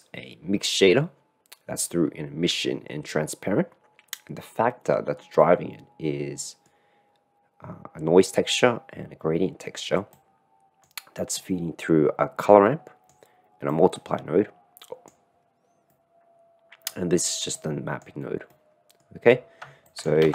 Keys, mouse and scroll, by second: 5.4-6.9 middle drag, 10.2 click, 11.4-13.1 drag, 13.8 click, 14.8 middle click, 15.9-16.9 middle drag, 17.7 click, 18.4 middle click, 18.9 click, 19.9 click.